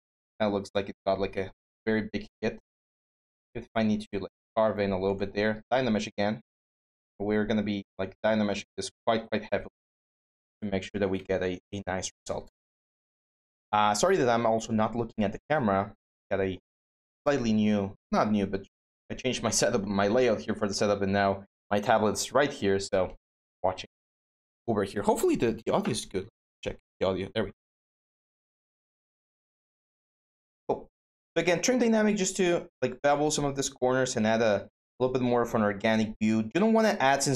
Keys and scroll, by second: 2.4-3.1 typing, 9.3-10.5 typing.